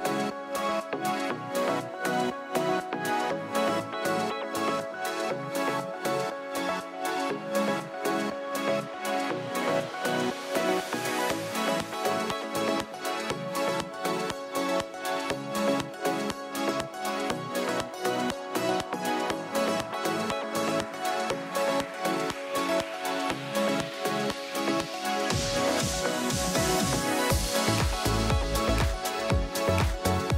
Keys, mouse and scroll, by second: 5.1 click, 6.1 F2, 7.7 click, 8.0 Delete, 9.1 click, 9.2 Delete, 11.4 click, 12.3 click, 13.0 click, 14.3 click, 15.6 click, 16.0 F1, 17.4 ctrl+d, 18.7 click, 19.1 h, 20.3 click, 20.6 click, 22.2 click, 23.5 click, 26.2 click, 27.2 F2, 28.7 click, 29.5 click, 30.1 click.